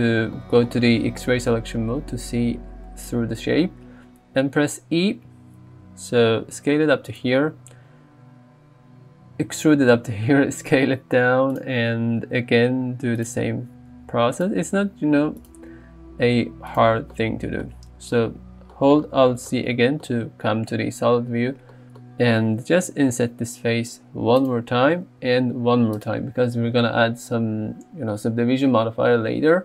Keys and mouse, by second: 4.7 e, 7.1 click, 7.8 s, 11.6 click, 12.2 e, 13.2 click, 13.5 s, 14.4 click, 14.9 e, 15.6 s, 16.7 click, 17.8 alt+z, 23.1 i, 24.4 click, 25.2 i.